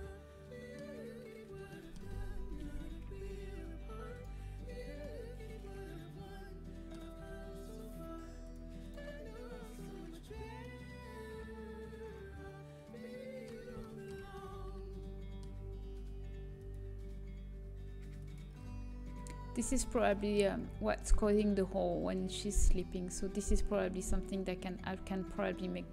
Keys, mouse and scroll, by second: 1.7-3.6 middle drag, 4.1-5.8 drag, 5.0-7.0 middle drag, 7.7-10.6 drag, 10.6-13.6 middle drag, 13.8-16.6 middle drag, 16.6-21.4 drag, 20.1-22.8 middle drag.